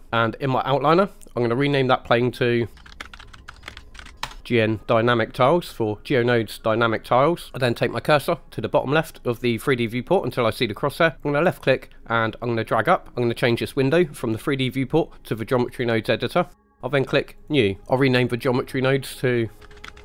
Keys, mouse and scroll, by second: 1.5 ctrl+z, 2.3 click, 2.5-4.2 shift+drag, 11.2 click, 13.9-15.8 drag, 17.4 click, 18.7-20.0 drag.